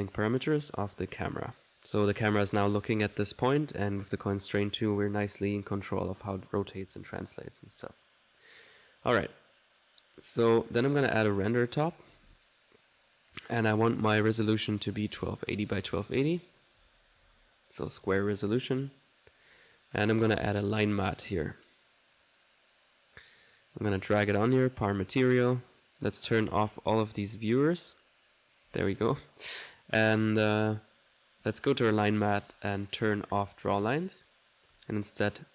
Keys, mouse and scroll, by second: 0.1-1.2 drag, 1.7 click, 1.9-3.0 middle drag, 3.0 click, 3.7 click, 7.4 middle click, 7.7 click, 11.8 click, 11.9-12.6 typing, 13.0 click, 14.6 click, 15.4 click, 15.9 click, 16.7 click, 18.8-19.9 drag, 20.2 click, 20.4-21.3 typing, 21.3 click, 22.2 click, 22.8 click, 23.7 click, 25.1 click, 25.8 right click, 26.5-27.2 typing, 27.0 ctrl+right click, 27.8 ctrl+click, 28.5-30.5 shift+drag, 30.6 click, 31.2 middle click, 31.5 click, 32.5 click, 33.4 click, 34.8 click.